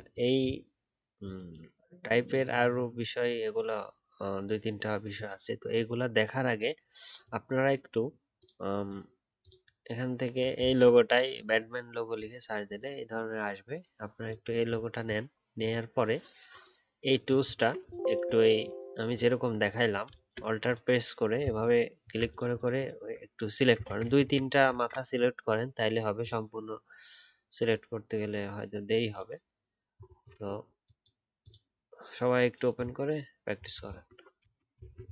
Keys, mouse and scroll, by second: 17.5 alt+scroll down 1, 19.2 alt+scroll down 1, 22.2 shift+click, 22.5 alt+double click, 22.7 alt+click, 24.0 ctrl+z, 24.2 ctrl+z, 24.7 ctrl+z, 33.8 alt+scroll down 1, 34.8 alt+scroll down 2.